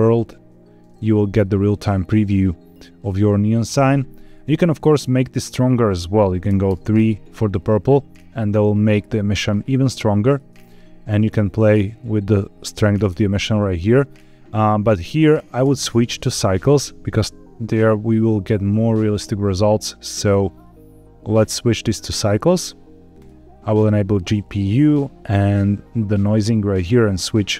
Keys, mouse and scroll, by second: 1.0-1.4 scroll down 2, 1.4 middle click, 2.4 scroll down 1, 2.6 scroll up 2, 3.0 middle click, 4.3 click, 10.2 click, 16.6 scroll down 2, 17.6-18.2 scroll up 2, 18.2 middle click, 20.4-20.8 scroll up 3, 21.3-22.4 drag, 23.1 click, 25.5-26.5 drag, 26.7 scroll down 2.